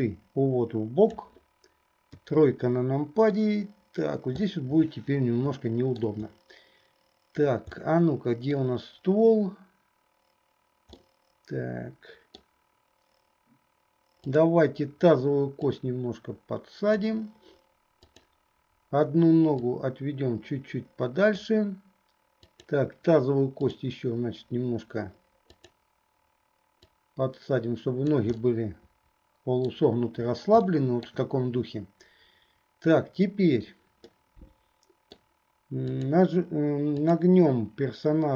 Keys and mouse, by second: 3.5-4.7 drag, 3.5-4.7 right drag, 5.7 shift+click, 5.7 shift+right click, 8.0 click, 8.0 right click, 11.2-12.7 drag, 11.2-12.7 right drag, 16.0-18.5 drag, 19.9-21.8 drag, 22.6 click, 23.8-25.9 drag, 27.1-29.9 drag, 28.5-29.9 middle drag, 28.5-29.9 right drag, 30.8 shift+middle click, 34.1-35.4 middle drag, 36.1 click, 37.2 click.